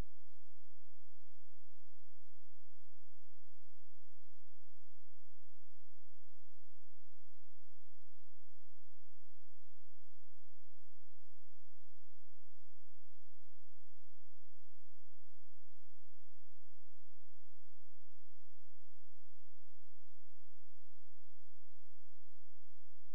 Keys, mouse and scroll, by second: 0.1 click, 1.5 ctrl+c, 2.6 click, 6.0 ctrl+v, 7.0 Return, 8.2 p, 9.4 ctrl+z, 10.4 click, 12.0 p, 12.9 click, 13.6-14.7 scroll down 1, 14.7 F4, 17.1 click.